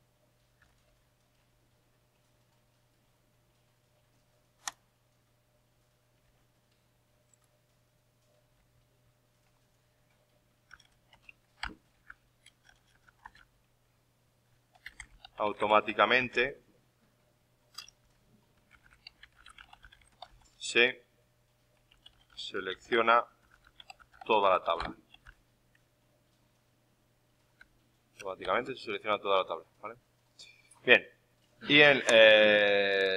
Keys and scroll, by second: 1.3 alt+Tab, 6.2 alt+Tab, 8.5 alt+Tab, 11.3-13.3 typing, 18.0 ctrl+shift+Left, 18.2-20.8 typing, 25.1 shift+9, 29.4 alt+Tab.